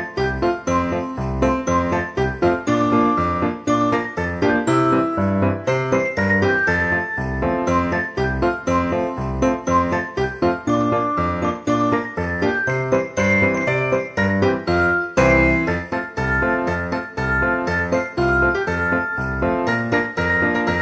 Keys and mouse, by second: 0.2 click, 0.3 alt+z, 1.5 click, 4.0 click, 5.3 KP_3, 6.2 Tab, 6.8 shift+middle click, 7.7 click, 8.2 g, 9.1 click, 9.9 g, 11.0 click, 12.4 g, 13.1 click, 13.8 g, 15.0 click, 15.8 g, 17.4 click, 18.4 g, 19.5 click, 19.9 e.